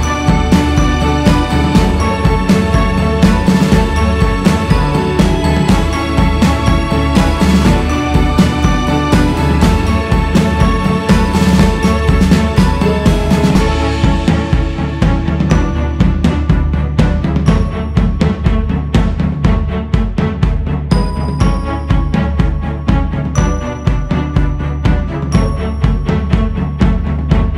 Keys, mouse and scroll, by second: 0.9-14.3 drag, 15.1-16.1 scroll up 2, 16.1-20.6 drag, 20.6-21.6 scroll down 2, 21.6 click, 22.8 click, 23.7 click, 24.7 click, 27.0-27.5 scroll up 3.